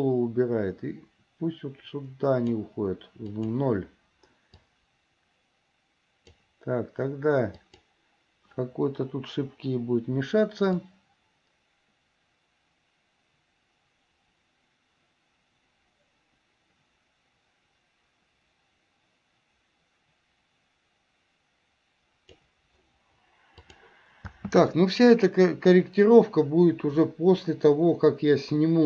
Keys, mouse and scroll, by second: 3.5 click, 4.8-6.6 drag, 7.6 click, 9.3 Delete, 11.0-22.6 drag, 23.8 click, 24.5 space.